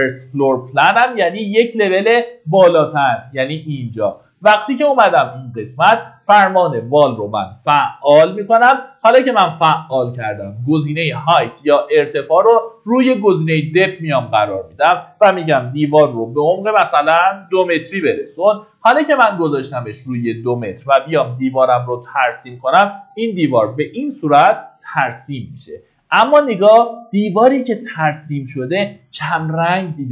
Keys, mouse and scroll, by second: 1.5 click, 5.3 middle click, 5.6-6.5 typing, 7.5 scroll, 8.9-10.0 drag, 16.2 KP_2, 19.9-21.0 drag, 22.7 Escape, 24.0-24.3 scroll up 1, 27.2-30.1 drag.